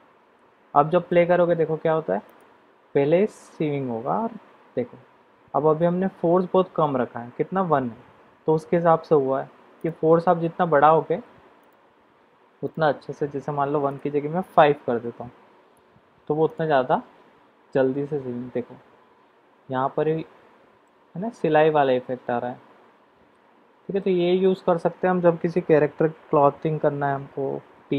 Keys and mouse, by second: 2.3 click, 10.1 click, 14.0-15.2 drag, 21.2-24.2 middle drag.